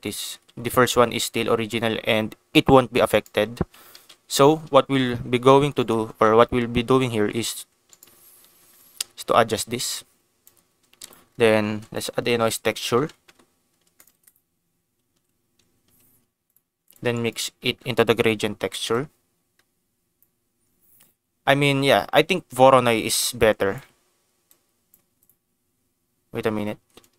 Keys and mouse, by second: 0.3 ctrl+z, 1.3 g, 1.5 g, 3.1 right click, 3.9 ctrl+z, 5.4 g, 5.7 right click, 6.1 ctrl+d, 6.1 ctrl+s, 7.5 g, 7.9 right click, 9.2-10.4 drag, 11.0 click, 11.6 shift+a, 14.1 shift+a, 17.1 ctrl+shift+click, 18.9-22.3 drag, 22.9 click, 24.5 click, 27.0-27.1 drag.